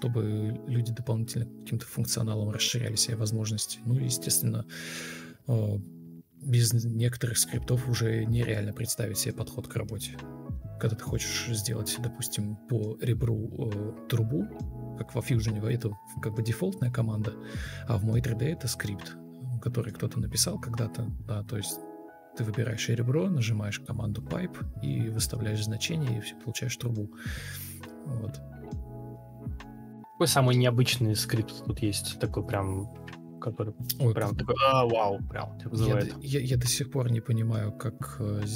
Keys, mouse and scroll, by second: 0.8 ctrl+space, 3.6 ctrl+space, 6.6 ctrl+d, 8.4 Escape, 12.1 Delete, 16.0 ctrl+scroll up 1, 16.1 ctrl+z, 18.9 alt+shift+c, 20.1 Escape, 22.2 Delete, 27.4 Delete, 31.6 Delete, 32.8 Delete, 38.3 Delete.